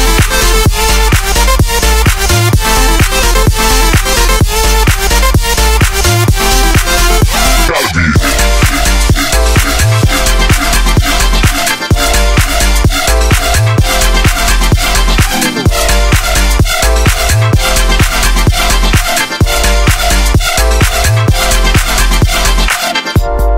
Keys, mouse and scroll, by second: 16.2 super+z, 16.7 super+z, 18.5 super+z.